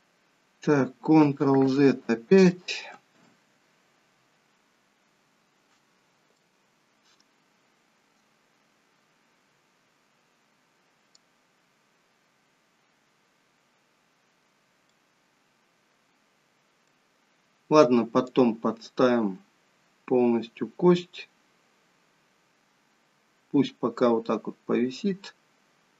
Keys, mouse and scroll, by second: 1.9 ctrl+z, 3.5 ctrl+z, 5.6-6.4 scroll up 2, 6.5 middle click, 12.1-15.0 scroll down 2, 15.0 middle click, 18.3 click.